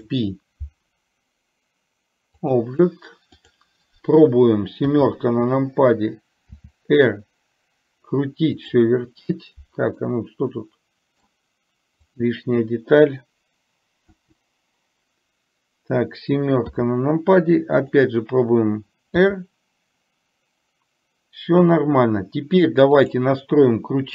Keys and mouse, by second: 3.4 click, 6.7 r, 10.1-11.3 middle drag, 12.2 click, 14.2 Delete, 17.9 click, 19.3 r.